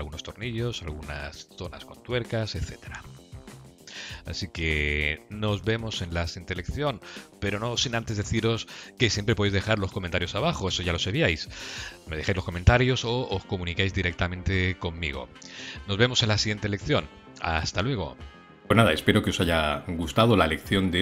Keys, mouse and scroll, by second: 3.6-4.6 scroll down 3, 4.1 middle click.